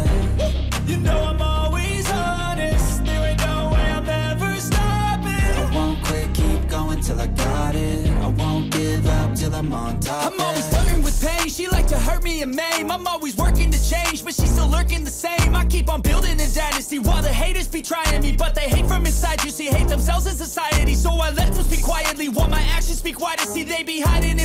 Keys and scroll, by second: 0.9 ctrl+z, 1.6 ctrl+z, 2.4 ctrl+z, 4.2 e, 9.0 ctrl+z, 9.7 ctrl+z, 10.5 ctrl+z, 11.3 ctrl+z, 12.3 ctrl+z, 22.0 b, 23.0 ctrl+z.